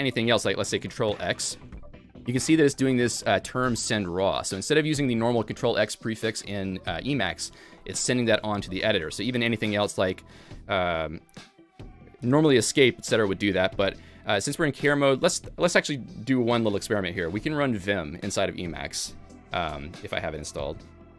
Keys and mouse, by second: 0.3 ctrl+x, 1.5 ctrl+x, 8.2 ctrl+x, 9.4 Escape, 11.1 ctrl+j, 11.6 ctrl+j, 13.0 BackSpace, 19.1 v, 19.2 v, 19.7 v.